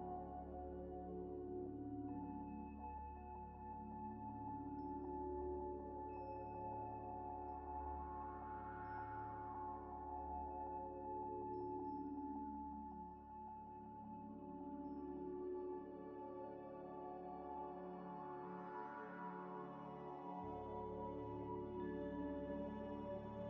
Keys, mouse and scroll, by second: 0.0 ctrl+z, 2.5-3.9 typing, 2.8 shift+click, 4.3 Tab, 5.4 scroll down 1, 7.6 Delete, 10.9 Tab, 13.4 خ, 14.2 ئ, 14.6 scroll down 1, 14.8 scroll up 1, 14.9 scroll down 1, 19.1 double click, 20.6 double click, 21.5 scroll up 1, 22.4 l.